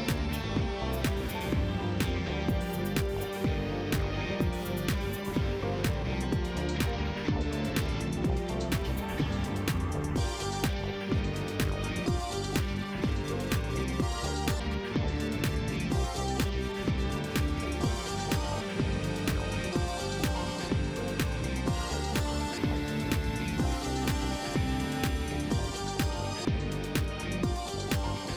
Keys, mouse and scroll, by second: 2.0 click, 3.1 space, 4.8 click, 5.3 shift+right click, 6.9 shift+right click, 9.1 click, 10.1 scroll up 1, 10.5 middle click, 11.9 click, 13.8 click, 14.3 click, 15.6 click, 16.2 click, 16.5 middle click, 17.4 click, 18.7 click, 19.9 KP_8, 20.0 KP_Enter, 21.5 click, 22.9 click, 23.5 KP_1, 23.6 KP_3, 23.9 KP_Enter, 25.5 shift+right click, 27.9 shift+middle click.